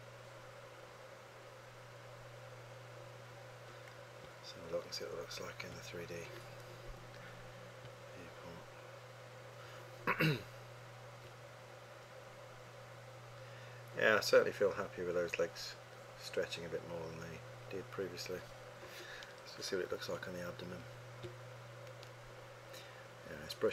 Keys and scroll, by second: 20.1 3.